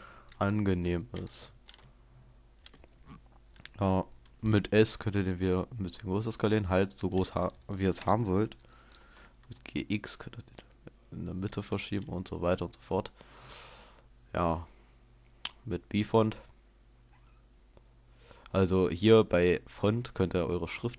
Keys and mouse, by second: 0.4 KP_0, 1.2 middle click, 2.0 middle click, 4.0 middle click, 4.6 s, 7.0-8.0 drag, 9.1 g, 11.9 s, 20.9 click.